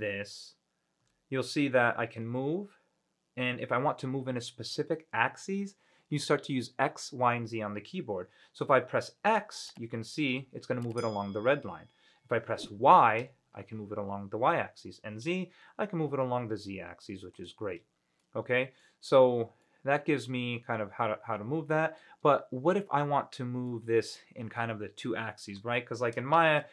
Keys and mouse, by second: 1.2 g, 10.5 x, 13.4 y, 15.4 z, 17.5 click, 17.9 ctrl+z, 18.4-19.0 middle drag, 19.8-20.1 middle drag, 21.2-22.2 middle drag, 23.9-24.3 middle drag.